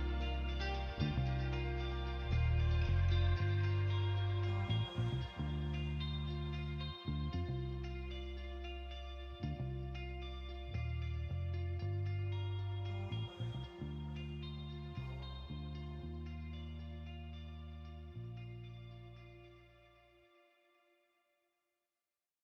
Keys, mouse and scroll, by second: 0.6 KP_7, 2.5 g, 2.9 y, 4.1 click, 7.3 shift+d, 7.6 r, 7.9 z, 10.4 click, 11.3-13.4 typing, 12.8 click, 14.7 shift+d, 15.1 z, 15.8 click, 16.2 r, 16.7 x, 17.8 click, 20.4 click.